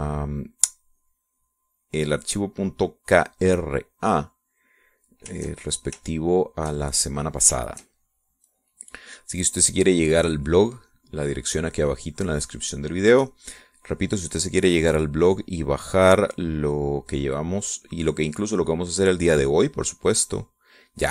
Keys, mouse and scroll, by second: 4.5 middle click, 5.0-6.3 drag, 6.7 shift+click, 7.1 shift+scroll up 1, 7.3-9.0 shift+middle drag, 10.2-14.0 drag, 14.1 middle click, 14.8 click, 15.8 click, 18.6-21.1 drag.